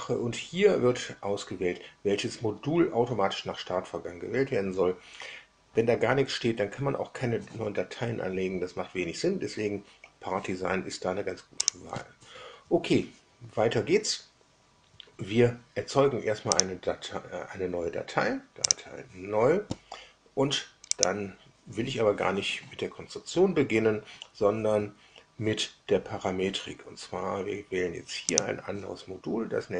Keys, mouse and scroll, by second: 11.6 click, 16.5 click, 18.6 click, 20.9 click, 28.2 click.